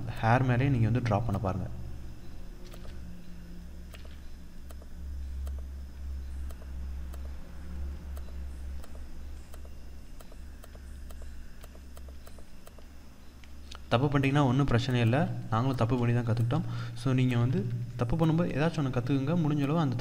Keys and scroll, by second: 2.3 ctrl+z.